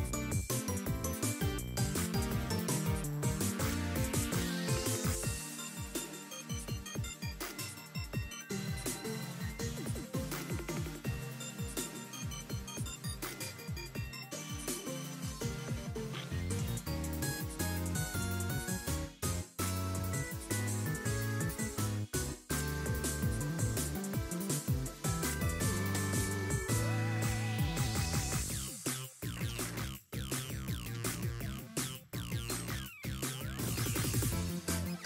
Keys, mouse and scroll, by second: 0.7 click, 1.2-4.5 drag, 5.0 click, 5.2 click, 5.7-6.4 scroll up 3, 6.7-9.2 drag, 9.4 scroll up 3, 9.6 middle click, 10.3 scroll down 4, 10.5 middle click, 10.8-11.5 scroll up 2, 11.5 click, 12.2 r, 13.2 r, 17.6 scroll down 2, 18.5 click, 20.2 click, 21.1 click, 21.9 r, 30.6 scroll up 2, 30.8-31.3 shift+middle drag, 32.7 r, 34.4-34.8 scroll down 5, 34.8 scroll up 2.